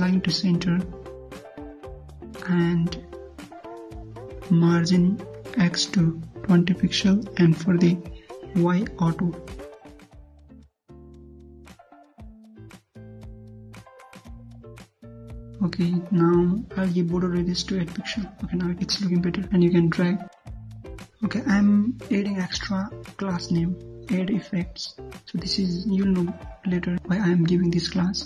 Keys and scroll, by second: 11.2 ctrl+F5, 14.5 alt+Tab, 18.1 ctrl+s, 18.5 alt+Tab, 18.6 ctrl+F5, 21.9 alt+Tab.